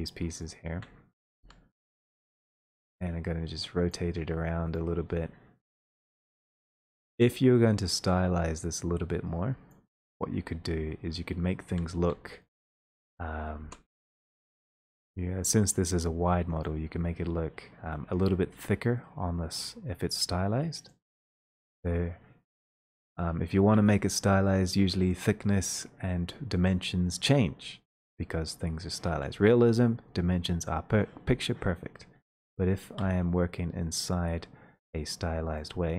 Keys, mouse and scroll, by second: 0.5 shift+click, 1.5 shift+e, 3.9-6.0 drag, 6.6 click, 8.9 click, 9.7-12.6 drag, 11.7-12.9 typing, 13.6 ctrl+space, 15.0 typing, 16.6 click, 21.7 click, 24.0 ctrl+space, 25.7 click, 31.2-32.6 scroll, 32.7 middle click, 33.0 ctrl+space, 35.6 click.